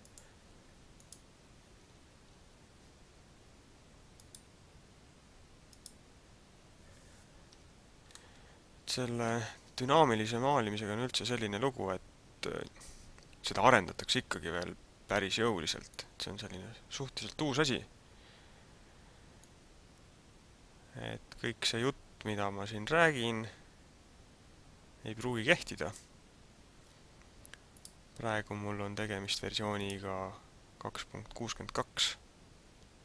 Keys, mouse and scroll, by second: 5.8 click, 7.7 Tab, 8.2 middle click, 16.0 click, 19.4 click, 27.7 click.